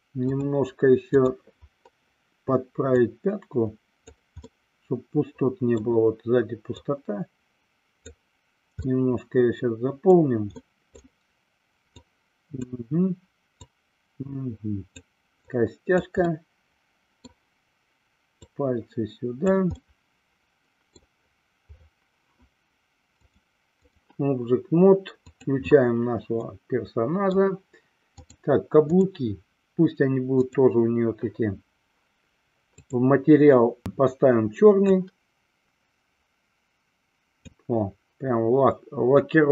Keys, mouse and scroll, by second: 0.6-1.6 drag, 3.2-4.4 drag, 4.7-6.0 middle drag, 6.9-8.3 drag, 8.9-10.3 middle drag, 10.8 middle click, 12.2 click, 13.7-15.2 drag, 15.5 click, 16.5-17.5 middle drag, 18.7-19.8 drag, 20.1-21.2 middle drag, 23.4 click, 25.8 click, 26.6-27.6 middle drag, 28.4-29.4 drag, 30.6 click, 32.9 click, 33.9 click.